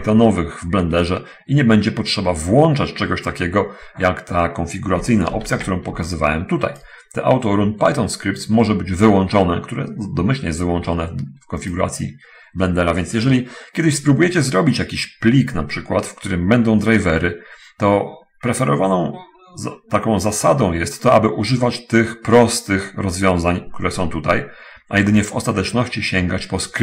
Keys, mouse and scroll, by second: 5.7 ctrl+alt+u, 6.3 alt+click, 12.0 click, 25.5 click.